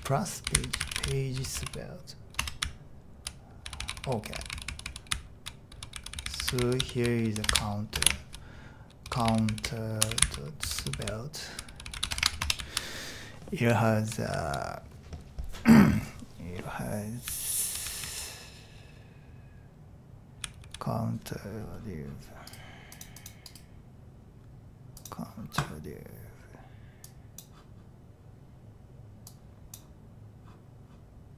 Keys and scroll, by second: 0.0-14.9 typing, 17.3-17.7 typing.